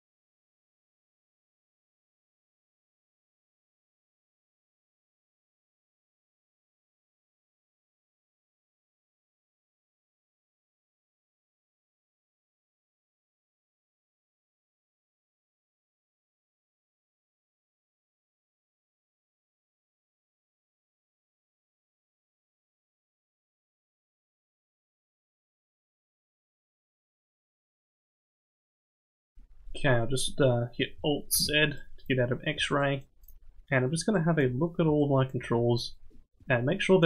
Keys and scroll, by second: 6.3 ctrl+z, 31.3 alt+z.